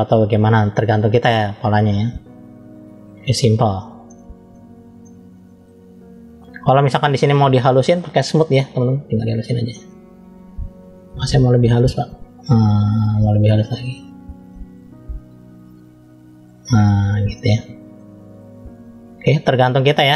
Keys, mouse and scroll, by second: 1.4-2.0 scroll up 1, 2.0 middle click, 3.2-3.7 scroll up 1, 3.9 shift+middle click, 4.9 middle click, 6.5 scroll up 2, 7.1 shift+middle click, 8.5 click, 9.1 click, 17.2 middle click, 18.4 scroll down 1.